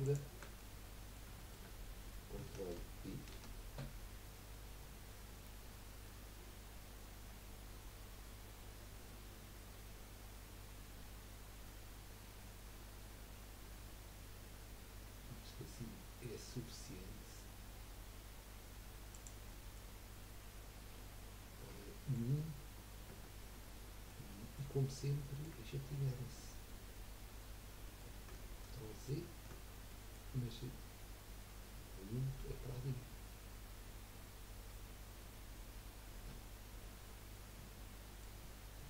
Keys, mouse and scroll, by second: 0.0 shift+click, 0.6-1.7 middle drag, 1.7 scroll up 1, 3.3 ctrl+b, 19.5 middle click, 20.2 scroll down 3, 21.1-24.4 middle drag, 24.4-24.8 scroll down 2, 24.8 middle click, 25.6 scroll up 1, 26.0-29.5 middle drag, 29.5 scroll up 2, 29.9-32.4 middle drag, 32.4 KP_1, 35.2-38.2 middle drag.